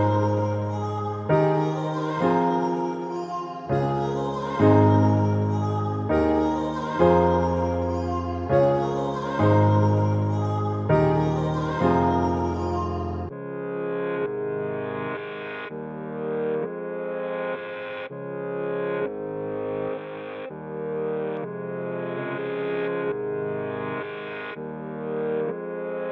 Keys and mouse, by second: 0.4 click, 2.6-6.4 middle drag, 7.5 ctrl+alt+KP_0, 9.8-11.0 drag, 13.7-15.1 middle drag, 15.7-17.0 middle drag, 18.8-19.4 drag, 19.4 middle click, 19.5 click, 20.9-22.3 drag, 22.0 space, 24.3 space, 24.7-26.1 drag.